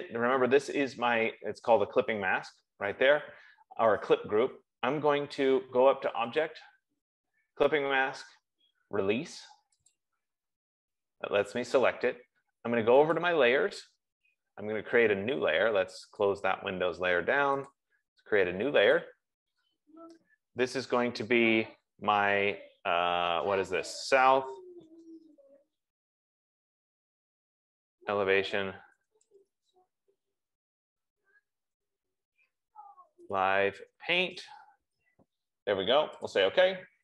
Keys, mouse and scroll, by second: 6.9 click, 10.2 click, 13.6 click, 15.1 F15, 16.6 click, 18.1 click, 19.5 click, 24.4 click, 25.0 s, 27.8-30.3 typing, 31.9 -, 33.0-35.0 typing, 36.8 click.